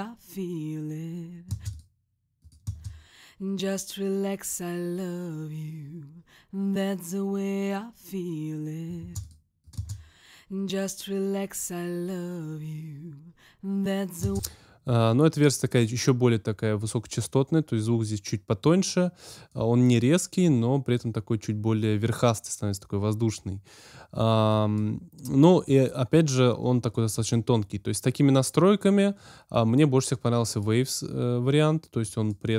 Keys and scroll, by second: 1.5 space, 2.6 space, 8.9 space, 14.2 space.